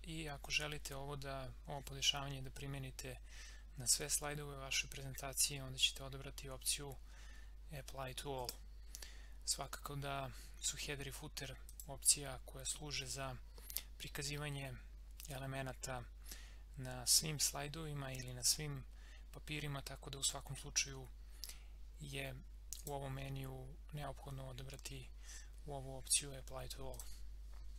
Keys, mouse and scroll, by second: 8.4 click, 11.7 click, 22.7 click, 26.9 click.